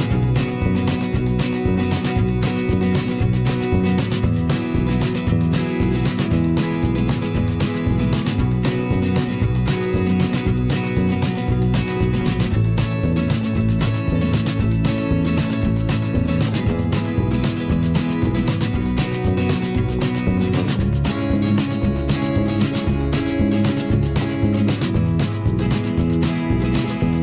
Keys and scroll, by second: 16.3 m, 17.3-19.2 typing, 21.0 ctrl+z.